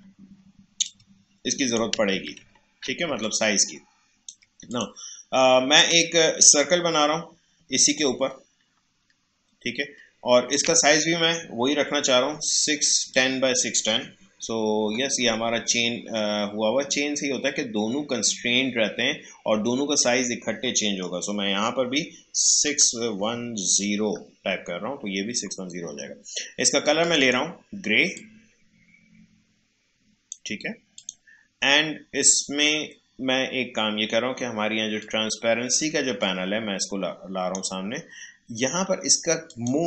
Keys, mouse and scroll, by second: 2.1 ctrl+z, 3.2-13.1 alt+drag, 13.1-16.1 drag, 22.6-23.8 typing, 24.4 Return, 27.0-31.0 drag, 35.0-39.5 drag.